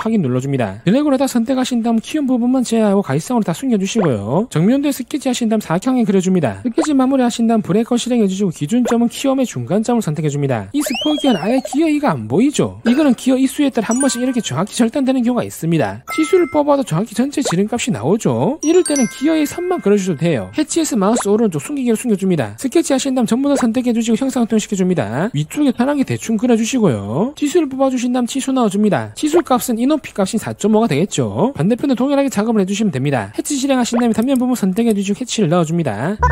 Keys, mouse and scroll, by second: 0.0 Tab, 1.0 click, 1.7 shift+click, 1.8 shift+Tab, 2.1 shift+click, 2.2 middle click, 2.5 shift+click, 2.7 shift+click, 3.0 shift+click, 3.4 shift+click, 3.5 scroll up 2, 3.7 middle click, 4.0 right click, 4.3 click, 5.0 click, 5.2 s, 5.4 middle click, 6.0 3, 6.2 click, 6.7 click, 6.8 click, 7.4 click, 7.8 c, 8.3 click, 9.3 click, 10.1 click, 16.3 click, 17.3 click, 18.3 click, 21.2 right click, 22.2 click, 22.7 click, 23.6 click, 24.3 click, 24.6 click, 25.1 click, 25.5 1, 25.8 middle click, 26.0 middle click, 26.7 click, 27.8 click, 28.5 click, 29.4 click, 30.2 4, 30.8 5, 34.4 click, 34.9 click, 35.6 click.